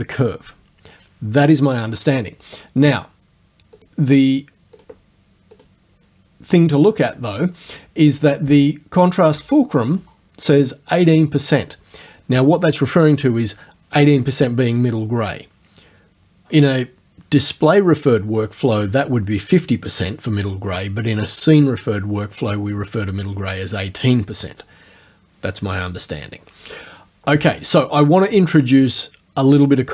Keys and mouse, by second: 3.8 click, 4.8 click, 5.6 click, 6.9 click.